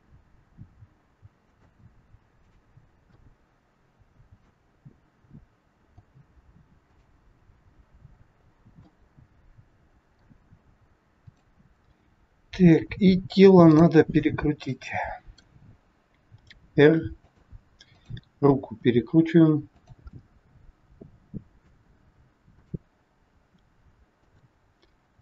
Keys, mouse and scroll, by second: 0.0 g, 2.4 click, 3.0 middle click, 5.8 g, 8.3 scroll up 2, 8.9 middle click, 8.9 scroll up 1, 11.2 click, 13.7 click, 14.7 middle click, 16.3 r, 17.9 click, 18.7 r, 20.1 middle click, 22.5 click, 23.2 r.